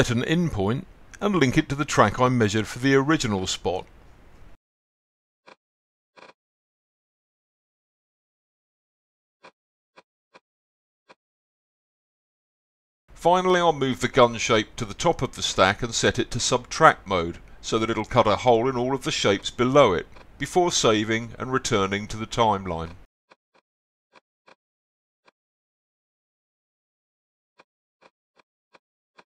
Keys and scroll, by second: 6.3-7.7 typing.